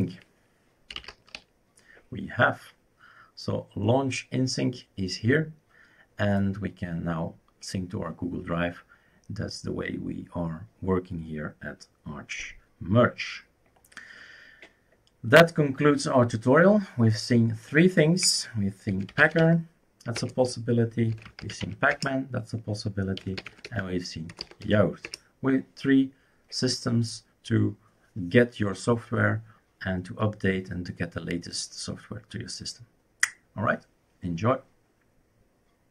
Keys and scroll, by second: 0.7-1.6 typing, 18.7-25.1 typing, 20.2 Return.